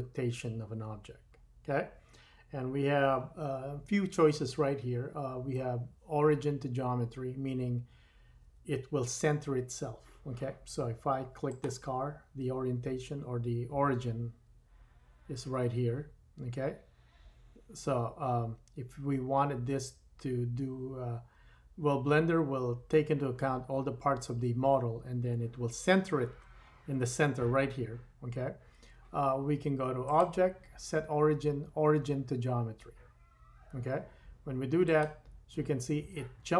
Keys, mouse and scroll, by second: 11.7-30.0 middle drag, 30.0-36.5 drag.